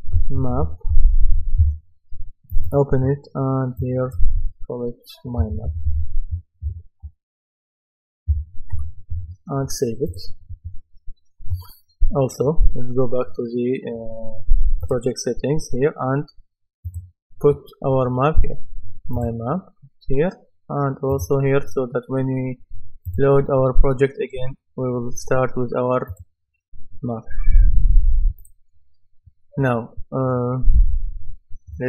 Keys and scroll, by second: 0.3-1.8 typing, 5.4-6.6 typing, 8.1-9.2 typing.